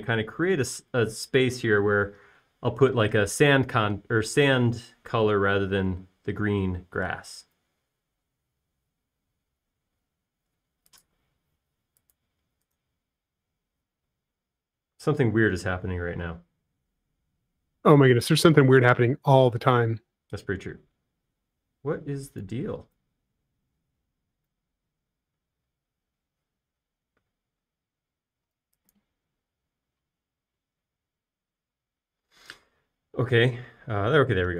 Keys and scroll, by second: 8.3 space.